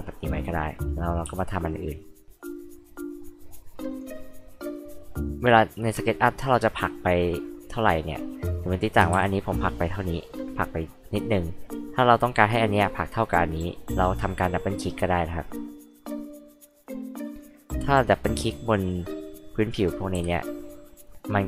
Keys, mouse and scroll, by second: 0.4 drag, 1.3 r, 1.9 click, 2.4 click, 2.7-3.1 scroll down 2, 3.9 click, 5.1-7.7 drag, 9.1 ctrl+z, 9.4-11.1 drag, 12.2-12.7 scroll up 4, 15.6 click, 16.1 click, 17.1 click, 17.3 click, 17.8 click, 18.0 click, 18.6 click, 18.8 click, 21.0 click.